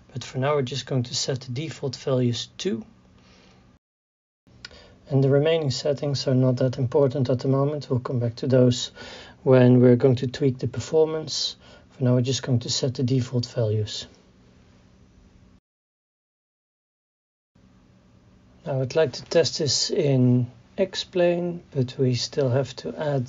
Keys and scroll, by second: 16.7 KP_6.